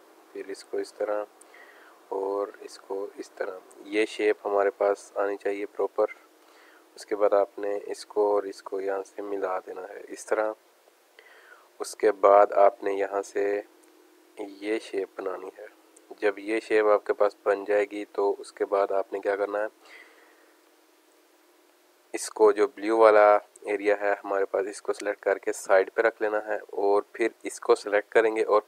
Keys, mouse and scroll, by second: 0.3 click, 1.9-3.5 drag, 4.6 space, 4.7 click, 5.1 space, 6.1 alt+scroll up 1, 7.1 click, 9.6 alt+scroll down 1, 10.0 space, 10.1 click, 10.9 space, 11.1 click, 11.4 space, 13.9-15.5 drag, 16.2 alt+scroll down 1, 16.7 click, 17.1 space, 17.6 alt+scroll down 1, 17.9 space, 17.9-19.5 drag, 20.3 click, 20.7 space, 20.8 click, 21.7 space, 21.8 click, 22.2 space, 22.8 click, 27.3 click.